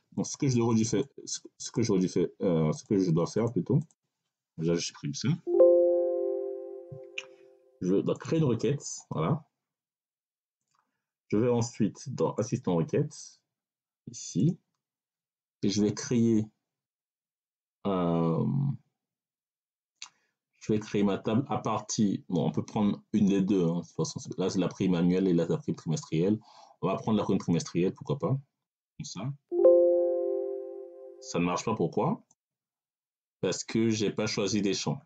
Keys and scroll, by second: 4.8 Delete.